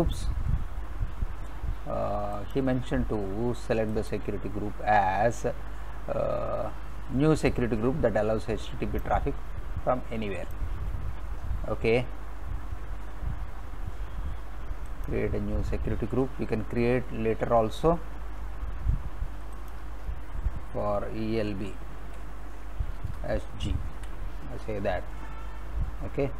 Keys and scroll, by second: 21.2-24.0 typing.